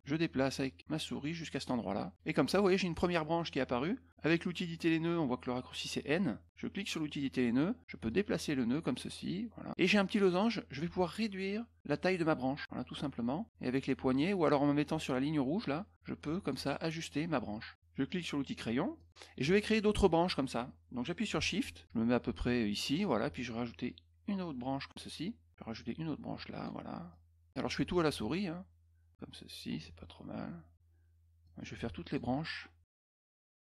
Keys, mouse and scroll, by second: 0.0-1.6 drag, 6.7 click, 8.0 click, 11.0-12.6 drag, 13.5 click, 15.6 click, 18.9 click, 23.0-24.8 shift+drag, 25.7 shift+click, 27.1 shift+click, 27.9-29.1 shift+drag, 29.8 shift+click, 31.4 shift+click, 33.0 shift+click.